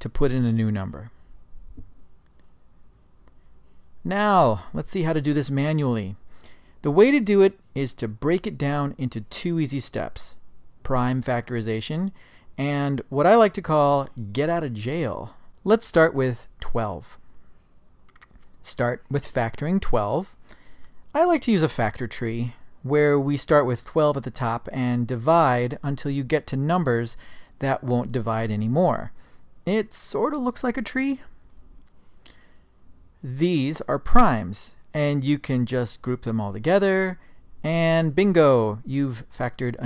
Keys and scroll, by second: 0.6 0.